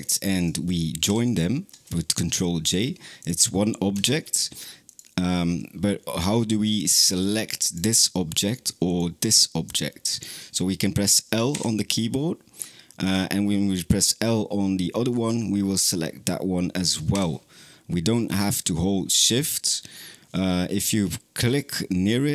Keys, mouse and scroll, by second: 0.9 ctrl+j, 2.5-3.1 drag, 3.8 Tab, 4.7 click, 6.9 click, 7.5 click, 8.7 click, 9.5 click, 9.9 click, 11.4 l, 19.4 click, 21.3 click.